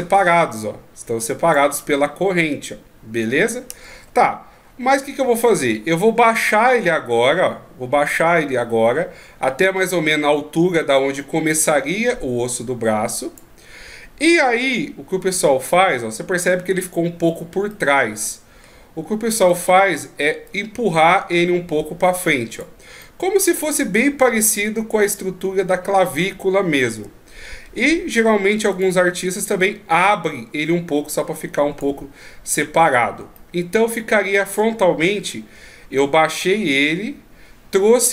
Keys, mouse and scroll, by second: 3.9 ctrl+z, 5.4 click, 17.7 middle click, 19.5 right click, 20.5 click, 23.0 middle click, 26.9 KP_1, 28.7 right click, 29.6 click, 33.4 middle click, 35.1 KP_1.